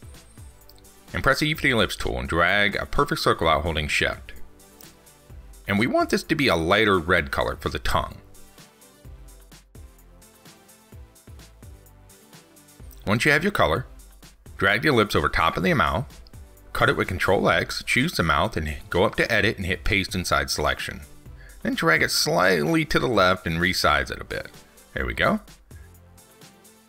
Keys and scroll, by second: 0.2 ctrl+shift+p, 17.2 ctrl+x.